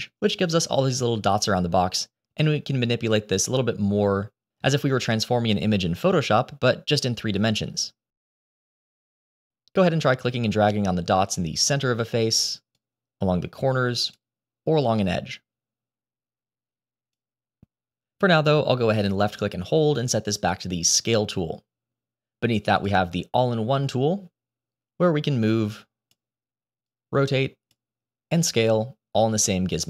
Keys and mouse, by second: 2.4 click, 2.6-6.6 drag, 7.7-8.8 drag, 9.8-11.7 drag, 13.2-14.6 drag, 15.3-17.6 drag, 19.2-21.0 drag, 22.7 click, 25.4 click, 26.8 click, 28.3-29.8 drag.